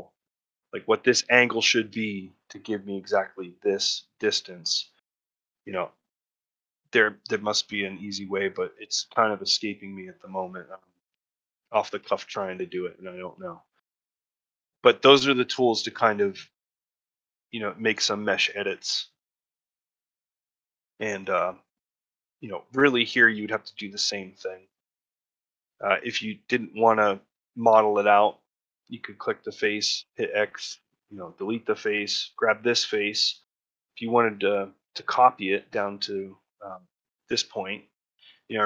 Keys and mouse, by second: 0.5-3.7 drag, 6.4 ctrl+middle click, 6.8 middle click, 7.4 shift+middle click, 7.7 middle click, 8.1 ctrl+middle click, 8.4 middle click, 9.3 middle click, 9.7 middle click, 10.5 middle click, 10.9 ctrl+middle click, 11.9 shift+middle click, 12.3 ctrl+middle click, 14.2 ctrl+middle click, 14.5 middle click, 14.9 shift+middle click, 16.1 middle click, 18.4 ctrl+middle click, 18.7 shift+middle click, 19.0 middle click, 19.5 ctrl+middle click, 19.8 shift+middle click, 20.1 middle click, 20.6 middle click, 21.0 shift+middle click, 21.4 ctrl+middle click, 21.9 shift+middle click, 25.3 middle click, 25.7 shift+middle click, 27.6 3, 27.9 click, 33.0 middle click, 33.4 shift+middle click, 35.5 shift+middle click, 36.4 shift+middle click, 37.6 shift+middle click.